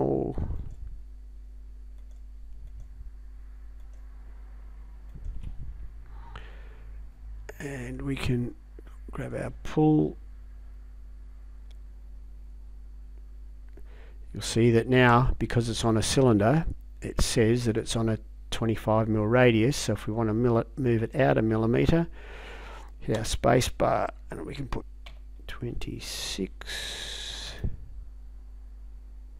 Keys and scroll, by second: 23.2 space, 25.1 2, 26.0 6, 27.5 Return.